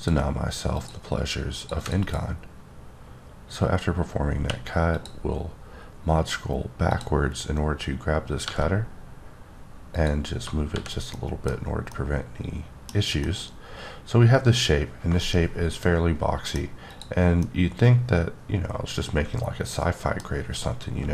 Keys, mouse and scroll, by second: 1.5 double click, 1.8 click, 2.0 click, 3.7-4.4 scroll up 3, 4.4 q, 4.9 click, 6.4-6.9 scroll down 1, 6.9 click, 8.4 g, 9.9 click, 10.4-10.7 scroll down 2, 10.7 h, 11.1 middle click, 11.6 scroll down 2, 11.9 middle click, 12.9 scroll down 3, 13.2 scroll up 1, 13.2-16.6 middle drag, 16.9 click, 17.4-20.2 middle drag, 20.3-21.1 scroll down 1.